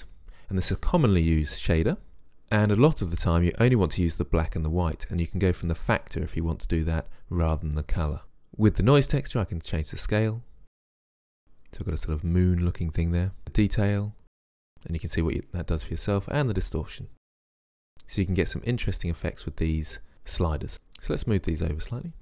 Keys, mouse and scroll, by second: 4.3 click, 9.3 click, 10.6 click, 13.4 click, 16.8 click, 20.7 click.